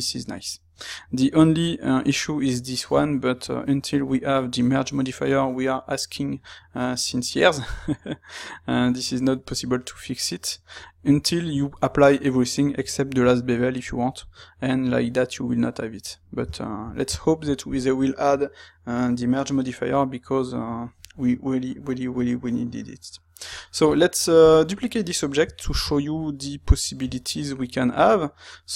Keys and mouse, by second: 16.3-24.5 shift+middle drag, 24.5 click, 25.8 shift+d, 27.2 Escape, 27.9 space.